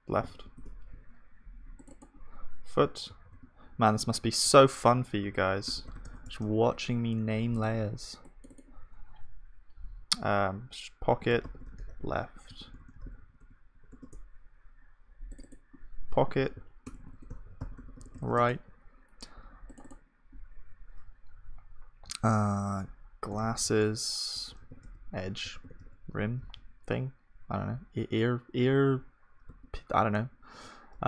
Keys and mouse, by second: 3.2 o, 12.6 BackSpace, 24.7 s.